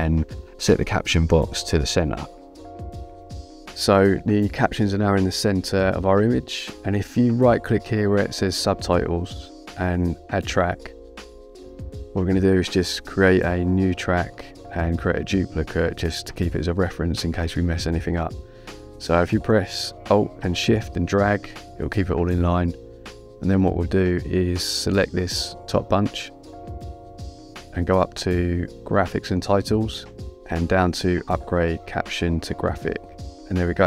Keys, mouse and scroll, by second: 1.7 click, 8.6 right click, 11.7 click, 13.3 click, 14.6 click, 19.2 alt+shift+click, 25.8 click, 29.3 click, 33.1 click.